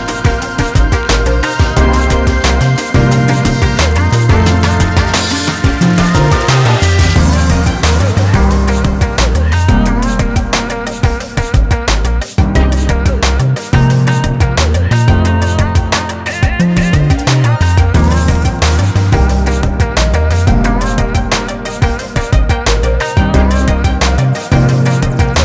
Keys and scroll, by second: 7.6 [, 7.8 [, 8.0 [, 14.4 ctrl+space, 22.2 [, 22.4 [.